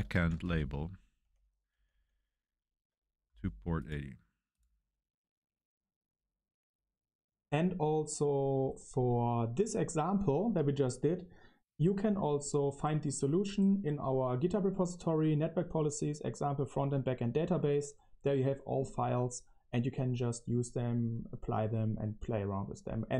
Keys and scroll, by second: 0.0-1.7 typing.